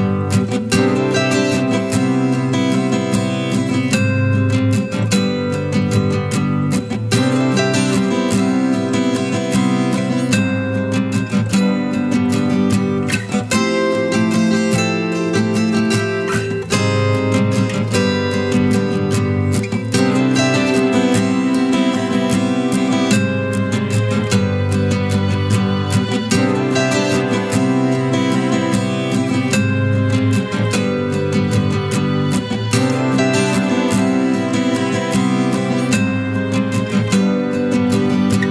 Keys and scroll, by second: 1.4 z, 7.4 ctrl+z.